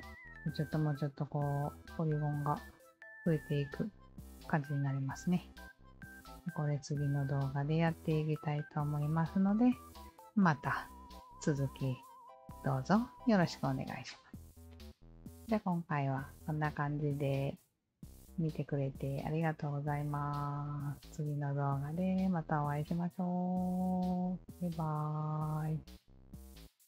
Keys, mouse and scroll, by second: 1.4-2.1 scroll down 2, 2.1-3.7 scroll down 1, 3.7-4.5 scroll down 1, 5.4-6.1 scroll down 2, 6.1-7.6 scroll up 1, 8.6 click, 9.6 alt+click, 10.5 alt+middle drag, 11.1-15.0 alt+drag, 15.9-17.2 alt+drag, 19.4-19.7 alt+drag, 24.8-25.3 alt+drag.